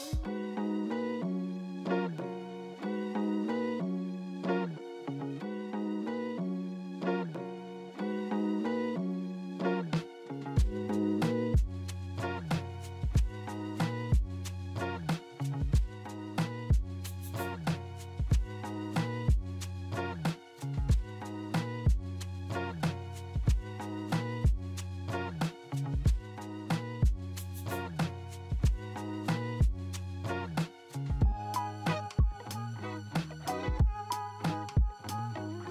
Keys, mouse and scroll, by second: 5.1 scroll up 2, 5.8 scroll down 2, 6.2 alt+middle click, 12.8 alt+middle click, 17.2 scroll up 2, 20.3-21.8 scroll down 2, 21.8-22.2 scroll up 3, 23.1 scroll down 2, 23.7-24.4 scroll down 1, 24.4 scroll up 2, 25.5 scroll down 3.